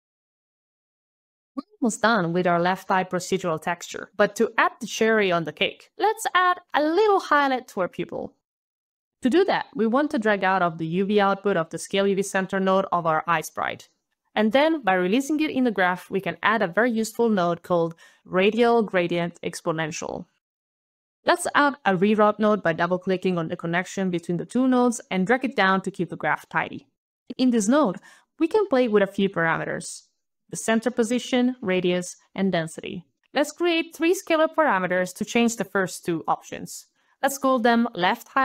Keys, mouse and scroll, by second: 0.0 alt+click, 0.2 alt+click, 0.3 alt+KP_1, 0.3 alt+KP_Enter, 0.6 alt+KP_2, 0.7 alt+KP_Enter, 0.9 alt+KP_0, 1.2 alt+click, 1.4 alt+scroll down 4, 1.6 alt+click, 2.8 alt+click, 5.1 alt+click, 5.1 alt+right click, 8.5 alt+right click, 8.7 alt+right click, 8.7 alt+scroll down 2, 8.9 alt+right click, 9.1 alt+scroll, 9.4 alt+click, 14.3 alt+right click, 15.9 alt+click, 17.0 alt+r, 17.2 alt+a, 17.4 alt+d, 17.5 alt+i, 17.8 alt+a, 17.9 alt+l, 22.0 alt+click, 22.0 alt+right click, 22.7 alt+click, 23.0 alt+click, 23.5 alt+click, 25.0 alt+click, 27.0 alt+click, 27.0 alt+scroll, 27.1 alt+click, 29.1 alt+scroll down 3, 33.1 alt+click, 33.4 alt+s, 33.6 alt+click, 34.7 alt+shift+l, 34.9 alt+shift+-, 34.9 alt+right click, 35.0 alt+shift+h, 35.0 alt+i, 35.0 alt+g, 35.2 alt+l, 35.2 alt+t, 35.3 alt+shift+-, 35.4 alt+shift+x, 35.6 alt+shift+o, 35.6 alt+f, 35.7 alt+BackSpace, 35.8 alt+BackSpace, 35.8 alt+shift+-, 35.9 alt+shift+o, 36.0 alt+f, 36.0 alt+s, 36.0 alt+e, 36.1 alt+t, 36.2 ctrl+alt+a, 36.2 ctrl+alt+c, 36.3 alt+Return, 36.4 ctrl+alt+Delete, 36.5 ctrl+alt+v, 37.0 alt+Left, 37.2 alt+Left, 37.3 alt+Left, 37.5 alt+Left, 37.7 alt+Left, 37.7 alt+click, 37.8 alt+Left, 38.0 alt+Left.